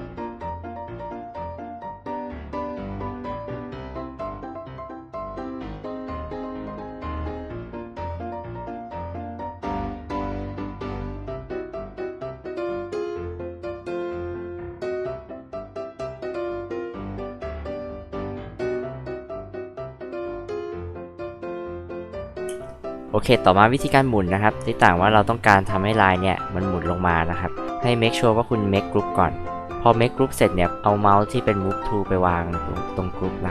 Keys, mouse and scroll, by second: 0.2 click, 1.1 click, 1.5 click, 2.0 click, 2.3 click, 2.6 space, 3.0 click, 3.2 m, 3.5 ctrl+click, 4.0 ctrl+click, 4.1 space, 4.2 click, 4.6 m, 4.9 ctrl+click, 5.3 ctrl+click, 5.9 space, 6.1 m, 6.3 ctrl+click, 6.6 ctrl+click, 7.1 click, 7.5 click, 7.9 space, 7.9 click, 8.1 click, 8.9 click, 9.2 space, 9.3 click, 9.5 m, 9.7 ctrl+click, 10.0 click, 10.3 ctrl+click, 10.7 ctrl+click, 11.1 space, 11.2 click, 11.4 click, 11.6 m, 11.8 ctrl+click, 12.1 ctrl+click, 12.5 ctrl+click, 12.9 ctrl+click, 13.3 click, 13.7 m, 14.2 click, 14.6 click, 15.2 click, 15.4 space, 15.5 click, 15.8 m, 16.1 ctrl+click, 16.7 ctrl+click, 17.3 ctrl+click, 18.0 click, 18.2-19.3 typing, 18.3 click, 19.1 click, 19.8 click, 20.3 click, 21.1 click, 21.6 space, 21.8 click, 22.1 click, 22.5 space, 23.8 m, 24.6-25.1 scroll down 2.